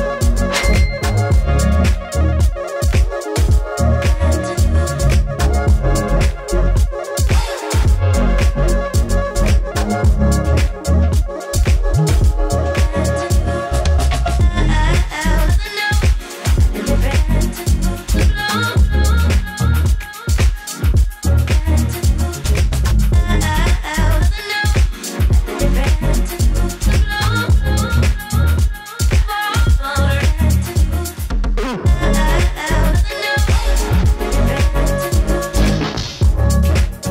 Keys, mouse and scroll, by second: 3.2-29.6 drag, 29.6 scroll down 1, 30.6-33.5 middle drag, 33.5-37.1 drag.